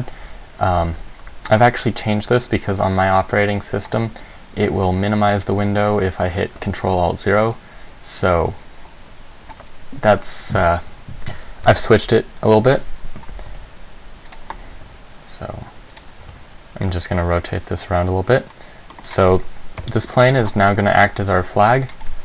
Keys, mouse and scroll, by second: 13.7 g, 14.5 click, 14.9 r, 16.1 click, 16.4 g, 18.0 click, 18.7 middle click, 19.3 right click, 19.9 KP_1, 22.0 right click.